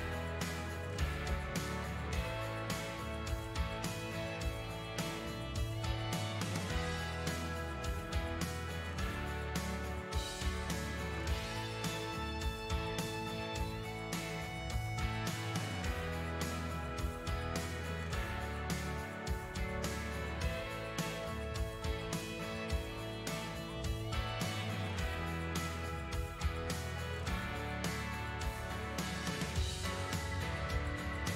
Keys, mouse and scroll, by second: 1.9-3.1 drag, 3.1-4.7 middle drag, 4.7-6.7 ctrl+drag, 6.7-7.7 middle drag, 7.7-8.9 ctrl+drag, 8.9-14.9 middle drag, 14.9 space, 15.2 middle click, 15.6 f, 16.4 click, 17.3 middle click, 17.8-22.1 drag, 22.1 middle click, 22.6-27.4 shift+drag, 27.4 middle click, 27.9-31.1 shift+drag, 31.1 middle click.